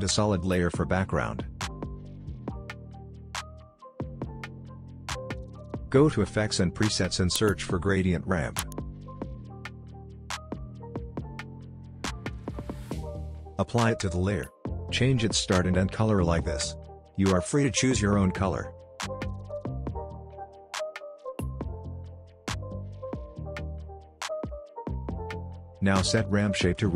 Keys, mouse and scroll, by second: 1.6-2.5 typing, 2.6 Return, 4.0 click, 6.8-7.9 typing, 11.0 d, 13.3-14.5 drag.